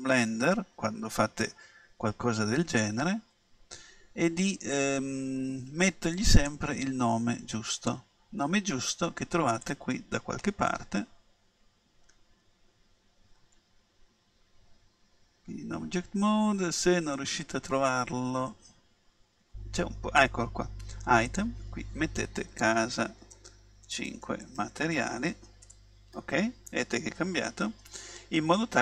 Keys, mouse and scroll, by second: 6.3-9.5 drag, 9.6-11.5 drag, 21.3-23.1 drag.